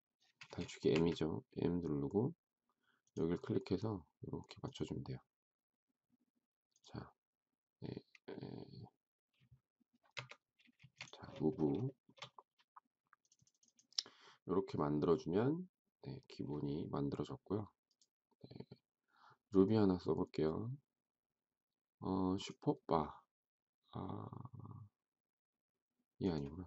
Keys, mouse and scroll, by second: 0.9 m, 10.1 Escape, 10.7 space, 11.8 shift+middle click.